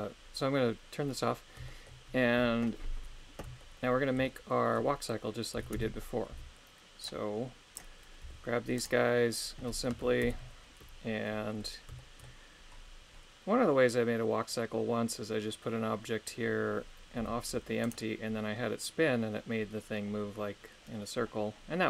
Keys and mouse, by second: 1.7 shift+middle click, 3.7 shift+middle click, 4.3 shift+middle click, 5.5 a, 5.7 a, 6.3 b, 8.2 g, 8.8 right click, 10.3 shift+Left, 12.0 shift+middle click, 17.2 g, 17.8 right click.